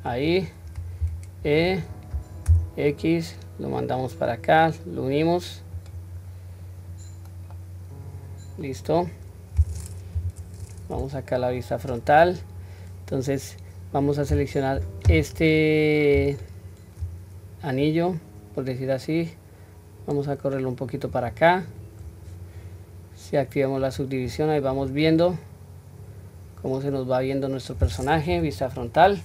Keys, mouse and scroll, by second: 0.1 click, 1.0 e, 6.9-7.5 scroll down 1, 7.5-8.7 middle drag, 7.5-8.7 scroll down 1, 10.2 KP_1, 11.0-11.6 scroll down 1, 11.6-12.4 scroll down 1, 13.2-14.0 scroll up 1, 16.3 alt+click, 17.8 click, 19.4-21.1 drag, 22.1-23.8 scroll down 1, 23.8 click, 23.8 scroll down 1, 24.8-25.3 scroll up 3, 25.3-27.1 middle drag, 27.3-27.9 scroll down 1, 27.9-28.3 scroll down 2, 28.3 KP_1, 29.1-29.2 scroll up 1.